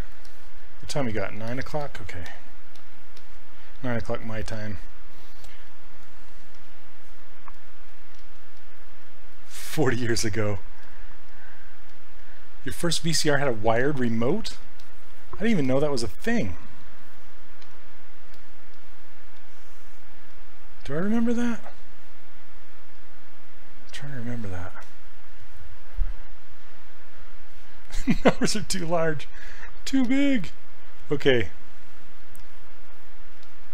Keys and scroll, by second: 0.9 s, 8.2 s, 10.8 s, 18.4 s, 33.4 s.